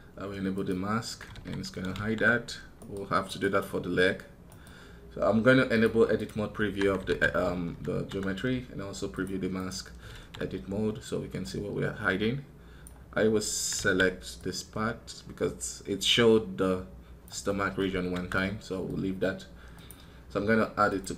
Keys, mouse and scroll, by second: 2.6 right click, 3.1 right click, 4.3 right click.